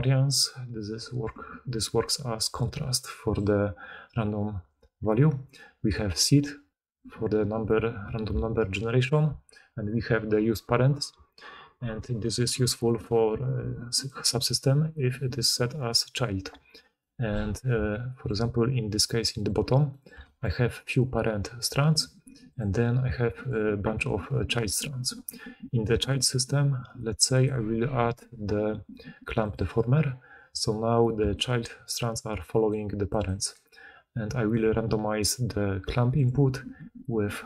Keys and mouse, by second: 0.1 click, 19.5-20.1 shift+right drag, 20.1-22.6 drag, 22.6-23.3 middle drag, 23.3 click, 23.5-27.4 middle drag, 27.4-37.4 drag, 31.2-33.5 d, 33.5-37.4 right drag, 34.5 d.